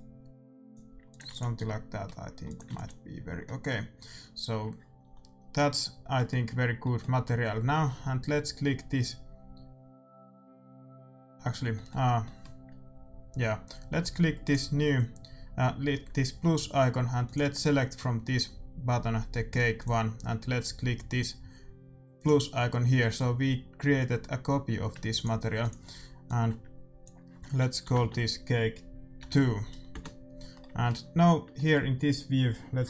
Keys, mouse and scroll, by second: 1.2 ctrl+s, 1.6-5.8 middle drag, 2.6 ctrl+s, 6.2-8.5 middle drag, 11.7-14.0 middle drag, 14.3-16.1 drag, 17.2-19.0 drag, 22.1-24.1 drag, 25.1-27.0 drag, 27.9 BackSpace, 30.5 middle click.